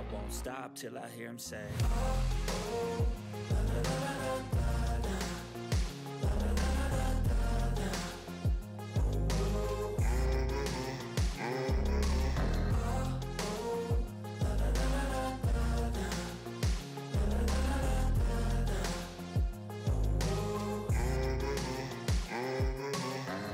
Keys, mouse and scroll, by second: 0.5 click, 1.2 ctrl+scroll up 1, 1.7-2.9 drag, 3.8-4.5 ctrl+scroll down 2, 4.8-7.3 drag, 5.6-7.1 drag, 8.8 5, 9.1 click, 9.4-9.9 ctrl+scroll down 2, 9.9 ctrl+scroll down 1, 10.1 ctrl+scroll up 1, 10.2 click, 12.3-13.4 drag, 14.3-16.6 typing, 17.2-18.0 drag, 22.5-23.5 drag.